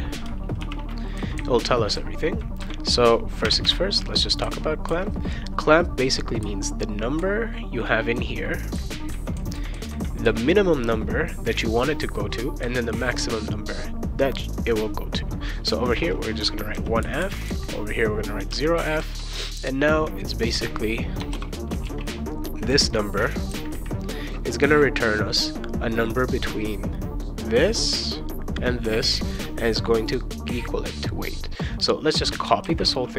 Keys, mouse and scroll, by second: 0.6 shift+0, 3.4 ,, 3.6 ,, 16.4 1, 16.7 f, 18.1-19.0 typing, 21.1 BackSpace, 21.3 ;, 21.8 ctrl+s, 31.7 click, 32.6 ctrl+c.